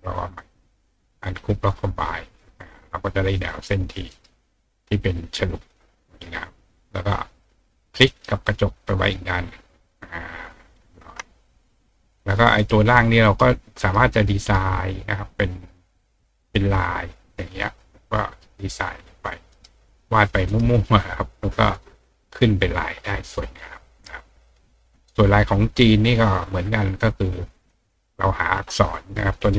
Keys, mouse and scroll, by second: 1.8 click, 3.5 click, 4.1 right click, 4.8 click, 5.6 click, 6.3 click, 7.7 ctrl+click, 8.1 ctrl+right click, 8.8-10.7 ctrl+drag, 11.1 ctrl+click, 12.2 click, 12.6 right click, 13.2 right click, 13.8 right click, 14.4 right click, 15.8 click, 17.4 click, 19.5 right click, 20.5 right click, 21.7 click, 27.0 click.